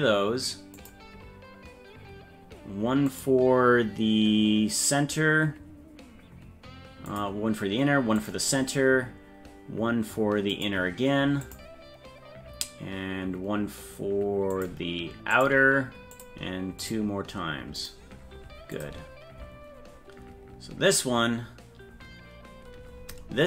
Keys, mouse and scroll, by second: 3.1-7.2 drag, 8.1-10.7 drag, 11.4-14.7 drag, 15.3 click, 16.8-17.9 drag, 18.7 click.